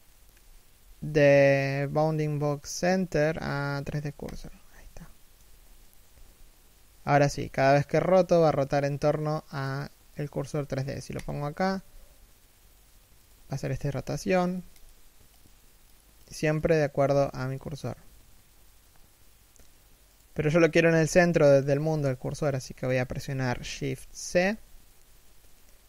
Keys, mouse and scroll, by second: 4.2-4.6 scroll down 1, 4.6 shift+middle click, 5.2-5.7 scroll down 1, 5.7 r, 10.8 click, 11.2 r, 13.1-13.4 scroll down 1, 13.4 r, 14.4 click, 16.6 r, 20.7 middle click, 21.3 1, 22.0 shift+middle click, 23.6 shift+c.